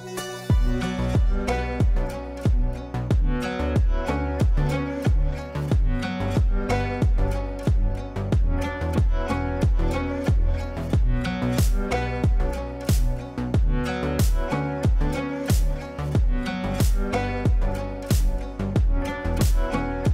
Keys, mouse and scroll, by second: 4.1-16.6 drag, 18.9 shift+click, 19.4-19.9 typing.